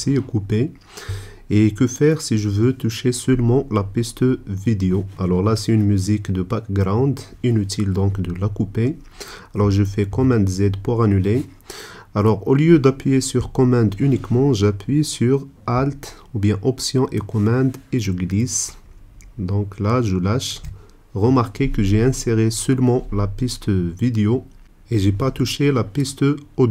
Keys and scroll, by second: 10.3 super+z.